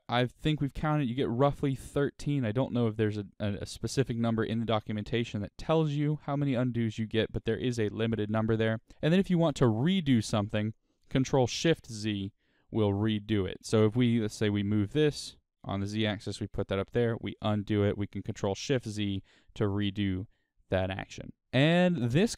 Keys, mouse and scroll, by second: 8.9 click, 11.4 ctrl+shift+z, 13.1 click, 14.1 g, 16.0 click, 17.3 ctrl+z, 18.4 ctrl+shift+z.